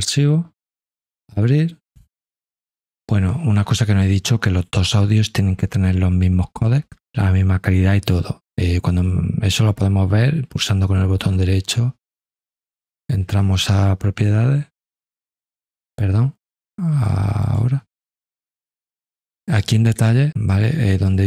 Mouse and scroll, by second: 1.1 click, 17.4 click.